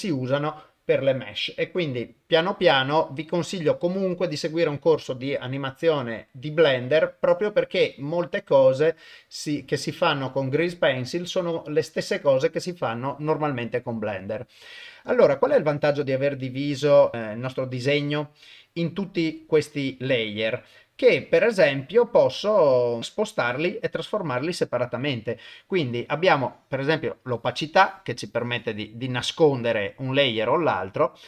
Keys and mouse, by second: 15.7-16.0 drag, 17.1 middle click, 18.3 middle click, 21.0 click, 22.3 click, 26.5-29.1 drag.